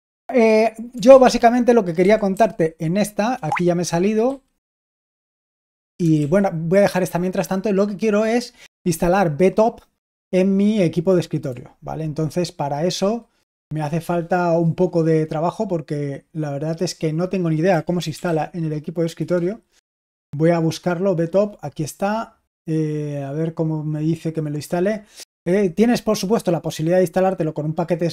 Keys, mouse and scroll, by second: 1.7-3.4 typing, 4.2 super+h, 6.1 super+l, 12.9 super+1, 17.4-18.7 typing, 19.1 Return.